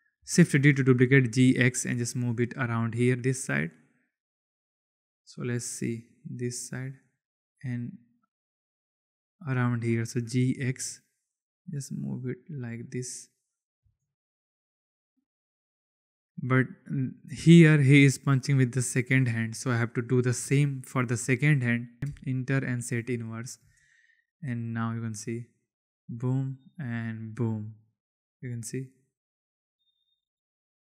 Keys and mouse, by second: 0.4 shift+d, 1.0 g, 1.3 x, 3.6 click, 7.4 click, 8.4 click, 10.2 g, 10.5 x, 13.2 click, 13.7 space, 19.2 click, 22.7 click, 23.5 space, 24.2 click.